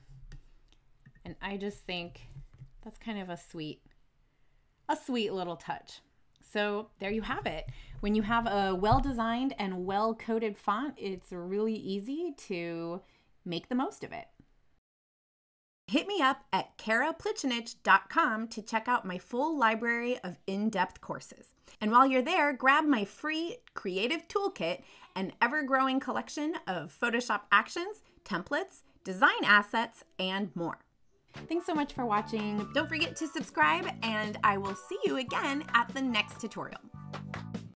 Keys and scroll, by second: 2.4 super+-.